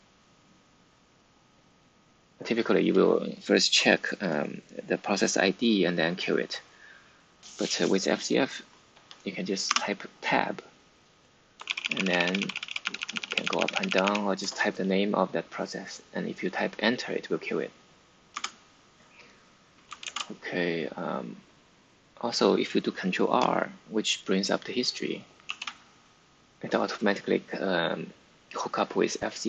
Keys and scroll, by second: 9.6 Tab, 11.6 Down, 11.7 Down, 11.9 Down, 12.0 Down, 12.2 Down, 12.3 Down, 12.7 Page_Up, 13.2 Up, 13.8 Up, 18.3 ↺, 20.0 ctrl+c, 25.4 ctrl+r.